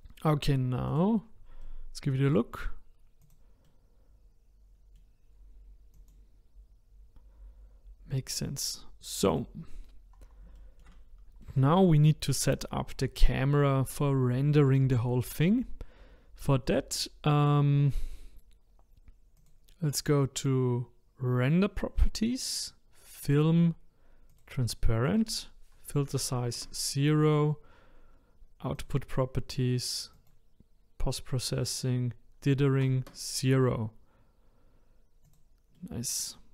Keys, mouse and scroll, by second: 0.9 click, 1.6-3.2 middle drag, 3.2 click, 3.6-5.9 middle drag, 5.9 click, 9.3 click, 10.1-10.6 scroll down 1, 10.6-14.4 shift+middle drag, 19.4 click, 22.4-23.2 scroll down 1, 23.2-23.7 drag, 23.7 scroll down 2, 24.3 click, 25.0-28.2 drag, 28.7 click, 30.1 click, 30.7-31.7 scroll down 2, 31.7-34.6 drag, 34.6-34.9 scroll up 2, 35.2 click, 35.7-36.5 middle drag.